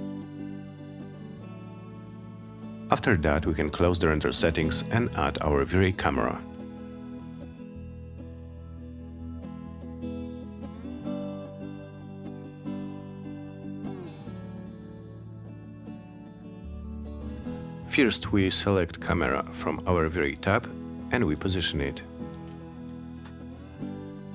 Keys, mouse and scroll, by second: 2.2 click, 5.0-5.4 scroll down 2, 5.4 middle click, 5.6-7.2 middle drag, 10.2 click, 11.5 click, 12.9 click, 15.8 click, 20.5-23.9 drag.